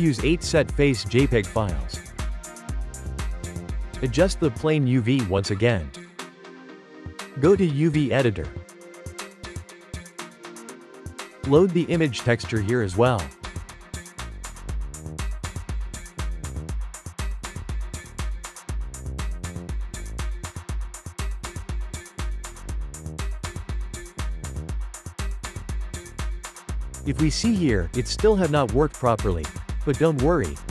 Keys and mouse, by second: 2.1-3.0 drag, 3.1 Tab, 4.1 u, 5.0 u, 5.1-9.9 drag, 9.9-11.4 ctrl+middle drag, 11.4 click, 12.7 click, 13.8 g, 16.2 g, 17.0-20.1 drag, 20.1 Tab, 21.0 click, 21.5 click, 23.3 click, 24.5 click, 25.1 click, 25.6 click, 26.2-26.8 ctrl+shift+middle drag, 26.8 g.